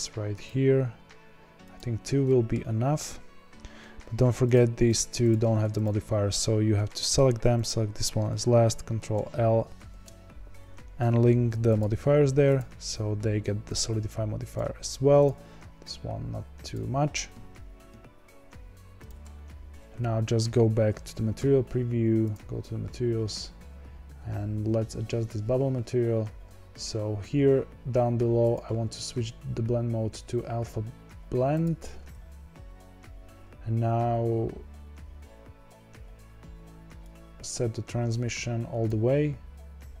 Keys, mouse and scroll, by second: 0.4-2.2 drag, 2.2-2.5 middle drag, 2.5-2.8 scroll down 6, 3.0 z, 3.4-4.5 scroll down 2, 4.5 click, 4.9 click, 5.8 shift+click, 6.8-7.6 shift+middle drag, 7.6 shift+click, 9.7 shift+click, 11.7 ctrl+l, 12.5 click, 13.7 click, 14.8 click, 15.2 click, 16.7-19.0 drag, 20.6 z, 37.2-40.0 drag.